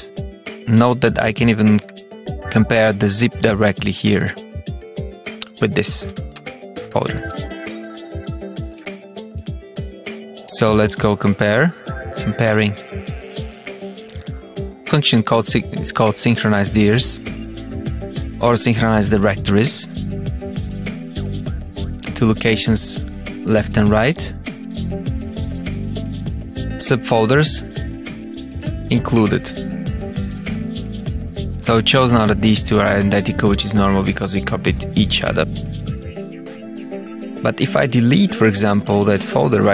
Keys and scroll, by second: 0.3 Down, 1.2 Tab, 1.7 Page_Up, 1.9 Return, 3.4 Return, 3.7 Tab, 4.8 Return, 5.5 Tab, 6.0 Down, 6.3 Return, 11.7 Escape.